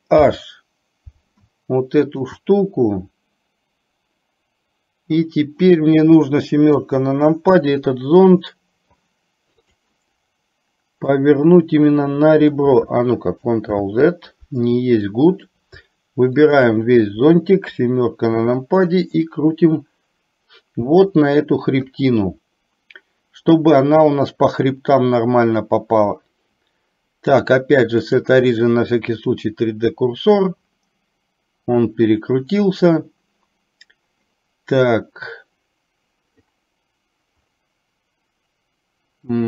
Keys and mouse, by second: 0.2 alt+h, 2.1 alt+click, 6.7 KP_7, 11.2 click, 11.5-12.6 drag, 13.7 ctrl+z, 15.1-15.5 middle drag, 16.5 shift+click, 17.7 KP_7, 19.4-22.0 drag, 27.5-29.4 drag.